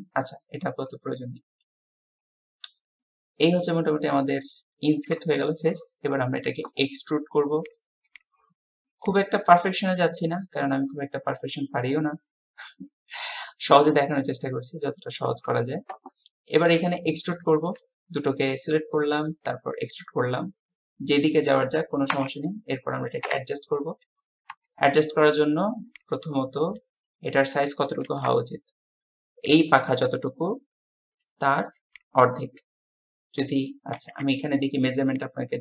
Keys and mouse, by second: 0.9-5.2 middle drag, 5.4 shift+middle click, 7.7 middle click, 8.1 click, 9.1 click, 10.3-15.3 middle drag, 17.5 shift+middle click, 18.5 middle click, 19.5-21.3 drag, 22.1 KP_3, 23.3 KP_1, 24.7 shift+middle click.